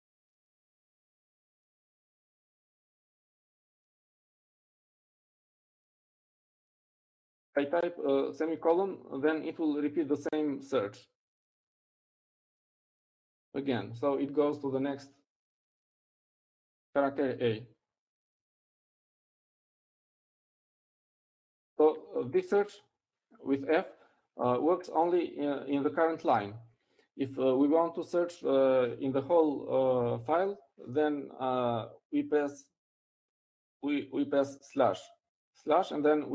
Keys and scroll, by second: 16.0 ;.